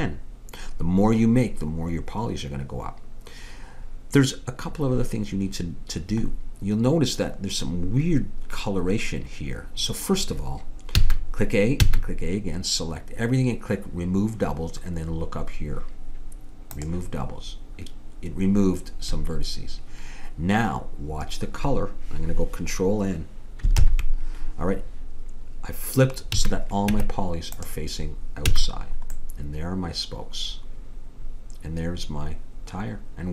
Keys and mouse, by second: 11.0 a, 11.8 a, 16.8-18.6 drag, 20.8-22.4 middle drag, 23.8 ctrl+n, 26.4 a, 26.9 Tab, 28.6 a.